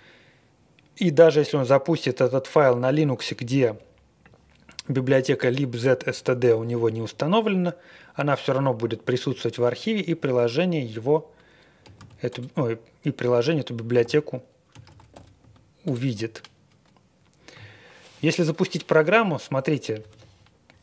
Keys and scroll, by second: 10.2 Return, 11.6-12.5 typing, 13.7-15.8 typing.